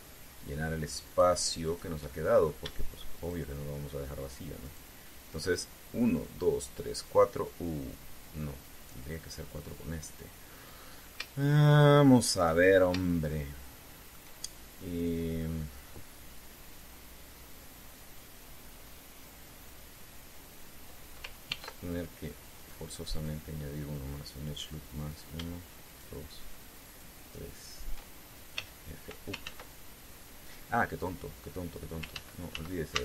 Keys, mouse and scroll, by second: 0.6 shift+right click, 1.8 shift+right click, 2.4 shift+right click, 2.8 shift+middle click, 3.9 shift+right click, 5.4 shift+right click, 11.4 middle click, 13.3-13.6 shift+scroll up 2, 13.8-15.0 shift+middle drag, 15.5 scroll up 2, 22.2 ctrl+r, 23.3 click, 23.9 click, 25.7 right click, 26.6 shift+right click, 27.6 shift+right click, 29.3 f, 30.2 ctrl+z, 32.9 ctrl+z.